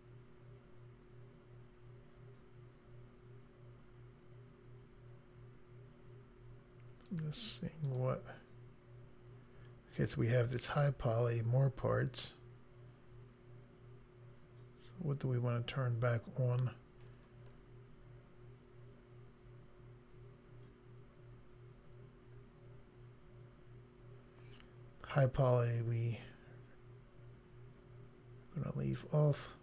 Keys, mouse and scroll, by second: 7.1 click, 7.8 click, 10.7 click, 17.1-17.6 scroll down 3, 21.7-23.0 scroll up 3.